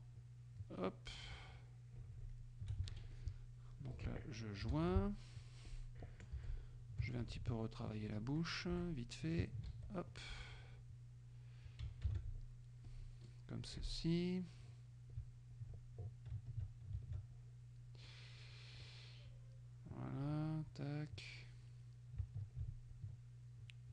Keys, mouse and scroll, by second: 1.5 shift+click, 3.0 shift+F2, 3.2 shift+click, 4.8 shift+j, 5.7 click, 6.4 Delete, 7.2 ctrl+click, 8.0 ctrl+click, 8.8 ctrl+Delete, 9.7 ctrl+z, 10.2 ctrl+click, 12.1 alt+j, 12.9 click, 13.7 Delete, 14.7 click, 15.6 ctrl+click, 16.6 ctrl+click, 17.1 ctrl+alt+click, 18.1 ctrl+alt+click, 19.3 click, 20.4 click, 22.3 ctrl+click, 23.0 ctrl+click.